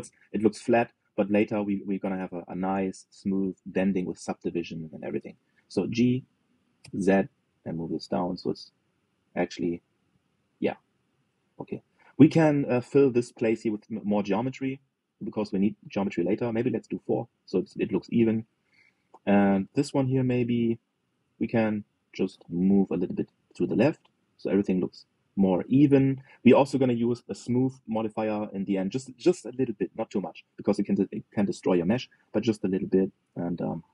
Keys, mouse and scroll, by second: 0.6-1.0 scroll up 4, 1.0-3.1 shift+middle drag, 3.1-3.8 scroll down 4, 4.2 click, 4.6 shift+click, 6.6 g, 10.3-10.7 scroll down 1, 10.7 middle click, 11.5 click, 11.8-14.4 middle drag, 14.4 click, 15.8 ctrl+r, 18.1 click, 18.4-20.4 middle drag, 20.4 click, 20.9 alt+shift+click, 21.9 alt+z, 22.6 g, 29.1 click, 30.7 alt+z, 31.2 click, 31.8-33.5 middle drag, 33.5 scroll down 2.